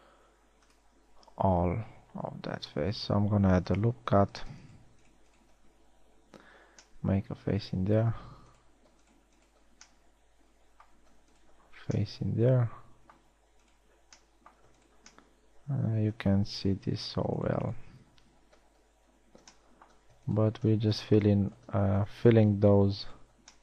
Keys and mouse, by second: 6.9 f, 12.3 f, 17.1 z, 18.6 z, 19.0 f, 19.5 z.